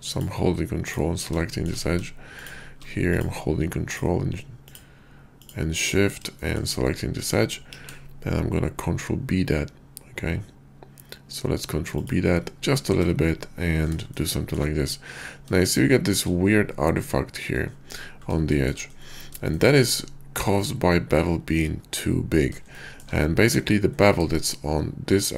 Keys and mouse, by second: 0.7 ctrl+click, 1.4 shift+click, 2.3 shift+click, 4.6 ctrl+click, 6.4 shift+click, 7.7 ctrl+b, 11.9 shift+click, 12.8 Tab, 14.1-14.6 shift+drag, 15.6-16.3 shift+drag, 17.4 click, 18.5 shift+middle drag, 19.5 shift+drag, 22.7 shift+click.